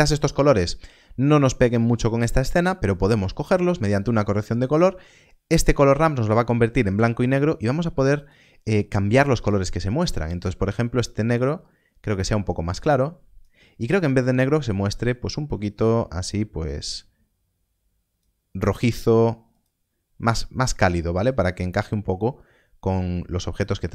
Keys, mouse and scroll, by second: 3.3 ctrl+shift+click.